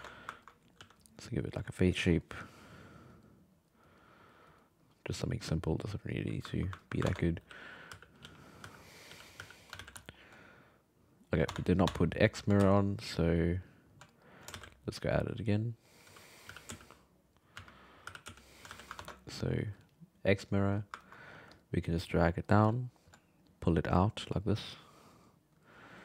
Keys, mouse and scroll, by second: 0.4 ctrl+middle click, 0.8 f, 1.4-6.5 drag, 6.5 ctrl+middle click, 7.0 ctrl+Tab, 7.4-9.4 typing, 9.3 click, 9.8 alt+a, 10.0 alt+middle click, 11.1 right click, 11.5 Tab, 11.8 Tab, 12.1-12.6 middle drag, 12.6 x, 14.1 alt+middle drag, 14.5 shift+a, 16.5 g, 17.5 s, 18.0 g, 18.7 alt+a, 19.0 ctrl+Tab, 20.4 click, 21.0 ctrl+middle click, 21.3 f, 21.9 click, 22.7 alt+middle click, 23.5-25.8 drag, 25.8 f.